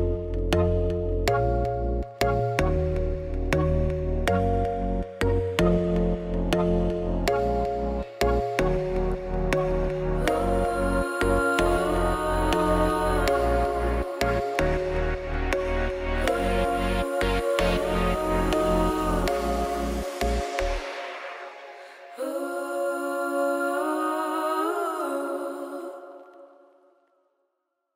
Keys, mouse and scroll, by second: 0.5 z, 0.8 middle click, 1.3 shift+right click, 1.5 shift+middle click, 1.6 scroll up 8, 1.9-3.2 shift+middle drag, 3.2 shift+a, 5.8 middle click, 6.4 r, 7.1 middle click, 7.6 g, 7.9 s, 9.0 ., 9.2 g, 11.3 click, 12.0 click, 13.6 click, 15.4 KP_Decimal, 16.9 click, 17.5-18.9 middle drag, 19.2 middle click, 23.0 scroll down 3, 23.1 middle click, 23.9 click, 24.5 scroll down 4, 24.7 shift+middle click, 24.9 ctrl+s, 25.1 KP_0, 25.6 KP_0, 26.1 z, 26.8 z, 27.1 ctrl+s.